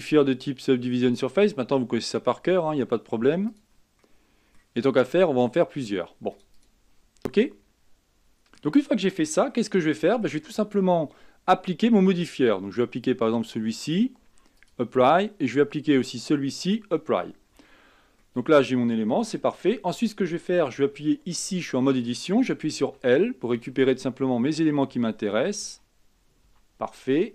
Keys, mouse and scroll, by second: 1.4-3.0 drag, 3.7-4.2 drag, 4.2-6.5 middle drag, 6.5 click, 7.4-8.0 scroll down 4, 8.0-12.8 middle drag, 14.1-18.4 drag, 18.4-19.6 middle drag, 19.6 Tab, 20.8 a, 23.1-27.3 typing.